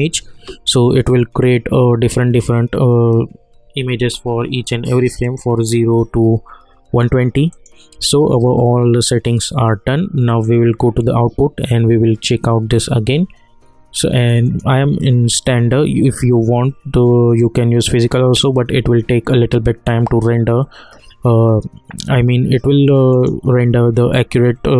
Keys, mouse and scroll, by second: 5.2 click, 7.5 click, 10.3 click, 14.4 click, 23.1 click.